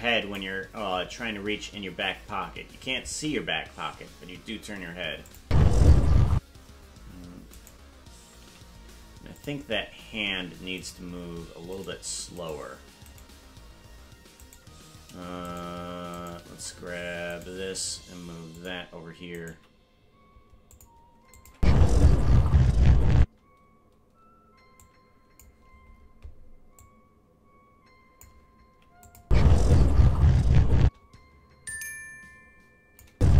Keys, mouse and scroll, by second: 5.3 click, 5.4 space, 6.4 space, 7.5 right click, 8.4 g, 10.9 right click, 11.8 right click, 12.5 right click, 13.1 right click, 14.4 right click, 15.5-16.2 shift+right click, 16.1 shift+right click, 17.3 right click, 17.6 g, 19.3 right click, 19.5 g, 21.4-23.3 drag, 21.5 space, 24.8 click, 26.7-28.2 drag, 29.0 click, 29.2 space, 30.8 space, 31.7-33.0 drag, 33.1 space.